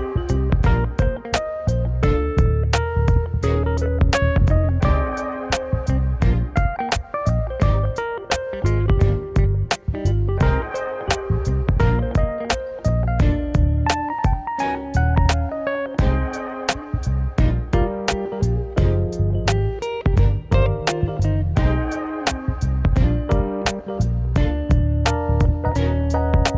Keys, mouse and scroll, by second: 0.9-3.5 middle drag, 3.5 click, 5.2 scroll up 2, 6.0-7.8 scroll down 2, 8.0 ctrl+s, 13.5-14.5 scroll up 1, 14.5 e, 18.0 click, 19.3 click, 22.8-23.3 middle drag, 23.3-23.7 scroll down 4, 23.7 middle click, 24.0 scroll up 1, 24.5-26.0 middle drag, 26.0-26.5 scroll down 2.